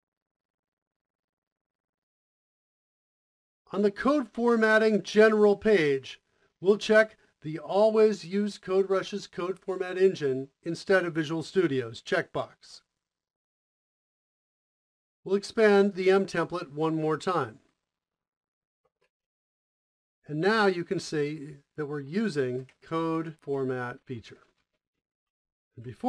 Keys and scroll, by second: 13.8-14.2 typing, 16.8 Up, 17.3 Return, 18.2 m, 18.6 m, 18.6 space, 21.7-24.9 typing, 25.2 Left, 25.6 Left.